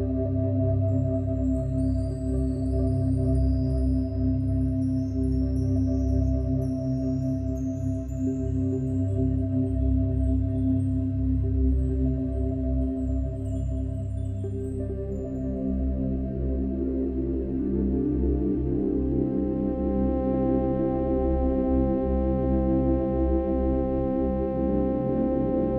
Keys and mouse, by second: 0.4 click, 1.6-2.9 alt+drag, 3.5 click, 4.7 click, 5.5 alt+drag, 6.0-10.6 alt+drag, 11.5 click, 12.4 alt+click, 13.2-15.6 drag, 15.8-17.7 alt+drag, 19.1 click, 20.3 click, 21.6-24.0 alt+drag, 24.7-25.5 drag.